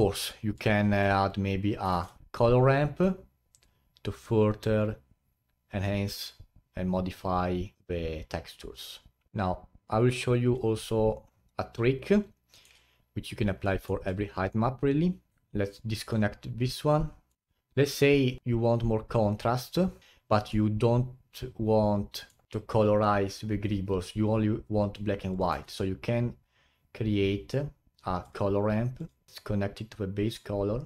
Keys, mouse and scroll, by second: 2.2 shift+a, 7.6-8.0 scroll down 7, 9.2 scroll up 3, 9.3-10.7 alt+drag, 10.7-15.3 middle drag, 15.3 ctrl+Right, 16.7-19.0 middle drag, 20.0-20.4 scroll up 4, 20.4-22.5 middle drag, 25.3 click, 25.5 shift+a, 29.3-30.8 drag.